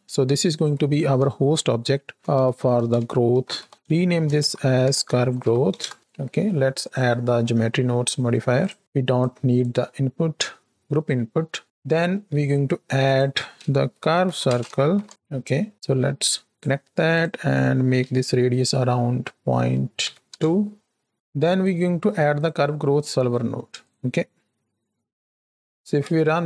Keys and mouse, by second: 0.5 F2, 3.7 BackSpace, 6.7 click, 7.4 middle click, 8.8 x, 9.1 middle click, 9.7-10.4 middle drag, 11.8 middle click, 12.2 shift+a, 15.7 middle click, 16.2 click, 17.1-20.2 drag, 21.1 x, 21.1 shift+a, 25.5 middle click, 25.6 shift+Left, 25.6 space, 25.9 space.